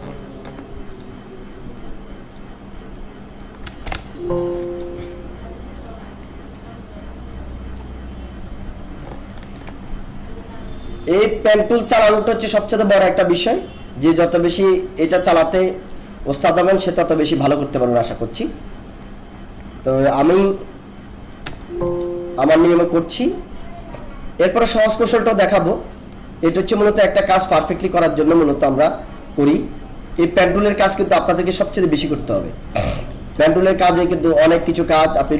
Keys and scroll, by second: 3.7 space, 21.6 alt+space.